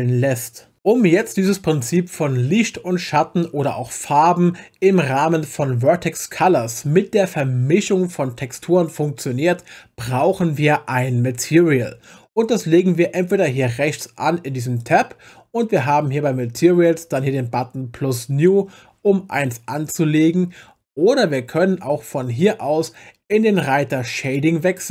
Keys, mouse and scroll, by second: 14.8 click, 24.2 click.